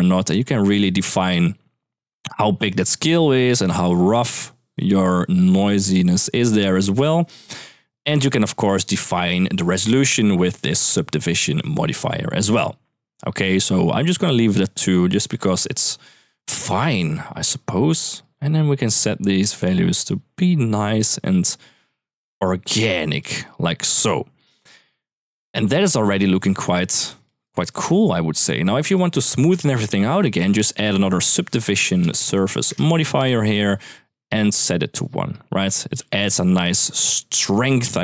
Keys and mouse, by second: 2.6 shift+middle click, 3.3-7.0 drag, 7.4-8.4 shift+drag, 8.7 middle click, 9.4 middle click, 10.5 click, 14.1 click, 15.0 shift+middle drag, 15.8 shift+middle drag, 16.6 middle click, 17.0 middle click, 17.5 middle click, 18.0 middle click, 19.0-20.1 drag, 20.5-23.0 drag, 24.7 middle click, 26.2 middle click, 27.0 middle click, 27.5 middle click, 28.7 click, 29.7 middle drag, 30.4 shift+a, 31.9 Down, 35.3 n, 35.7 n, 36.1 m.